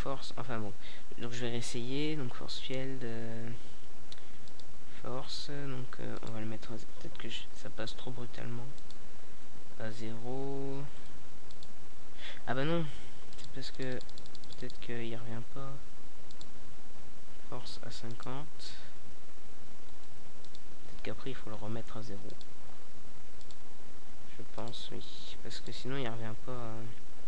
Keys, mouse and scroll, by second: 0.7-1.0 middle drag, 1.0-5.9 drag, 7.6-9.5 drag, 10.0-14.7 drag, 15.1 alt+a, 26.3 alt+a.